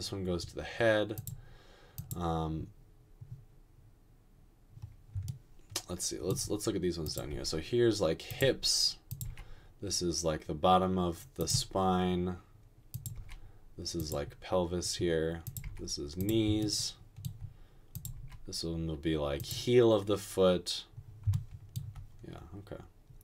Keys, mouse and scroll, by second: 7.4 g, 9.2 typing, 13.2 typing, 15.6 typing, 18.1 typing.